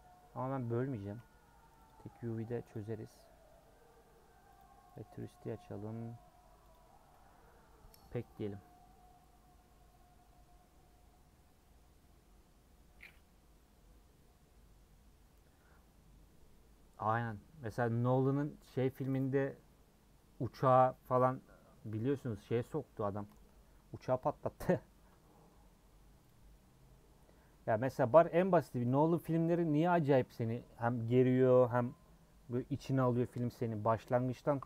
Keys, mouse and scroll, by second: 1.9 click, 4.8-23.7 drag, 28.0 click, 29.0 a, 29.4 scroll up 1.